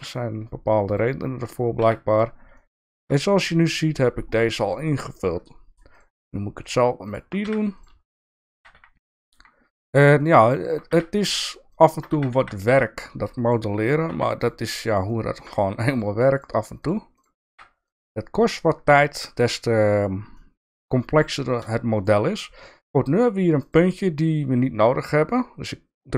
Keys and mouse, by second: 0.9 shift+click, 1.8 f, 2.1 click, 2.5 shift+middle click, 4.8 shift+middle click, 6.6 shift+click, 7.1 shift+click, 7.4 f, 8.3 shift+click, 8.5 f, 8.9 f, 9.1 f, 9.2 f, 10.2 shift+click, 10.9 f, 11.4 click, 11.7 shift+click, 12.1 f, 12.3 f, 12.6 f, 13.8 click, 14.4 click, 15.0 middle click, 16.8 click, 17.1 click, 17.4 f, 17.9 click, 18.3 click, 20.3 middle click, 21.3 shift+middle click, 22.0 click, 23.6 click.